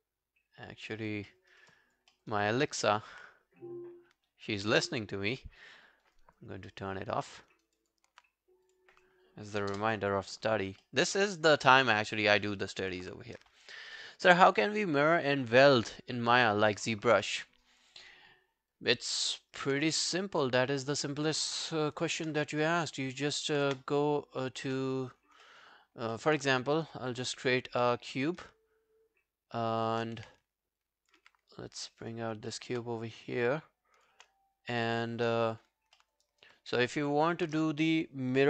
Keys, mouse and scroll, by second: 1.3 alt+middle click, 1.5 alt+right click, 1.7 alt+click, 2.1 alt+middle click, 2.3 alt+right click, 6.7 alt+middle click, 7.1 alt+scroll down 1, 7.3 alt+middle click, 7.5 alt+right click, 7.8 alt+click, 9.7 Return, 10.8 alt+middle click, 11.2 alt+scroll down 1, 11.4 alt+click, 11.9 alt+middle click, 12.0 alt+scroll down 1, 12.1 alt+right click, 12.4 alt+middle click, 12.6 alt+right click, 18.4 alt+scroll down 1, 18.7 alt+click, 19.0 alt+right click, 19.3 alt+middle click, 19.6 alt+right click, 19.8 w, 20.1 right click, 22.0 ctrl+1, 22.2 ctrl+scroll down 1, 22.9 alt+middle click, 23.0 alt+scroll down 1, 23.4 alt+click, 23.7 space, 24.6 space, 24.7 space, 24.9 scroll down 1, 25.5 alt+middle click, 25.9 alt+scroll up 4, 26.2 alt+middle click, 26.4 w, 27.2 right click, 28.5 shift+right click, 30.2 w, 31.2 r, 32.3 scroll up 1, 32.5 alt+middle click, 35.2 space, 36.0 alt+middle click, 36.3 alt+right click, 36.6 alt+click, 37.1 alt+right click.